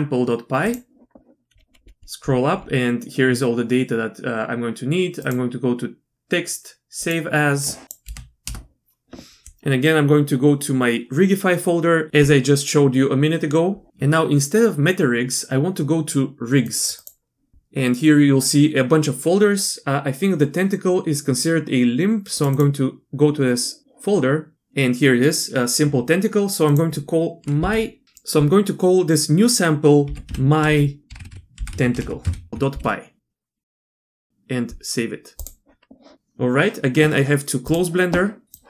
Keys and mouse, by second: 5.2-7.2 drag.